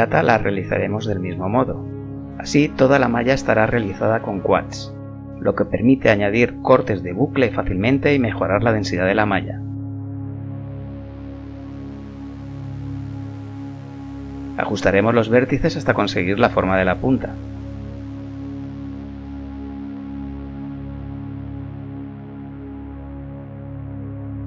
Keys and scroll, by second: 0.5 e, 2.8 1, 4.3 s, 7.2 s, 11.7 a, 13.9 g, 18.1 g, 22.9 a.